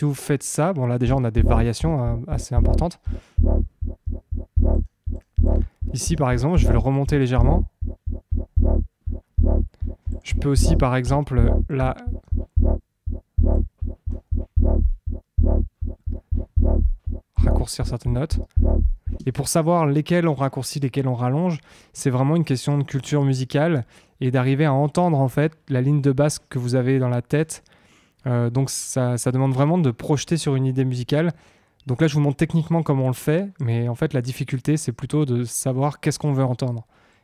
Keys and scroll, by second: 1.0 space, 19.1 space.